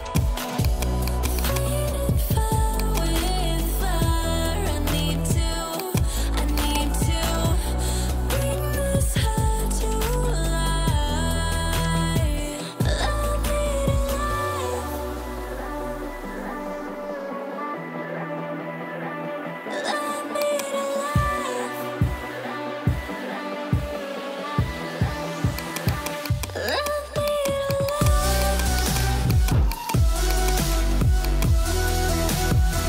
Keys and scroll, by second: 2.3 [.